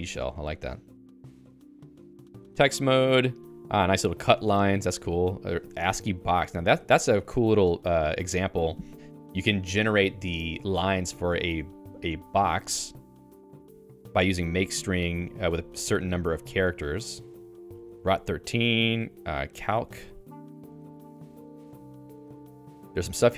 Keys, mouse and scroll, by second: 1.0 Escape.